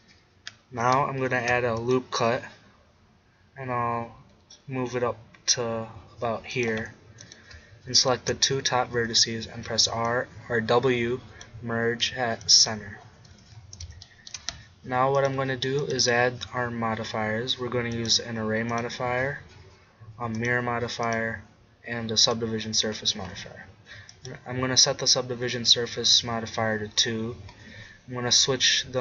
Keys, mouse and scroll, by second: 1.3 ctrl+r, 6.7-8.6 drag, 8.9 w, 13.3 Tab, 18.8-20.5 drag, 20.5 middle click, 21.0-22.8 drag, 22.8-24.1 middle drag, 24.1-26.0 drag.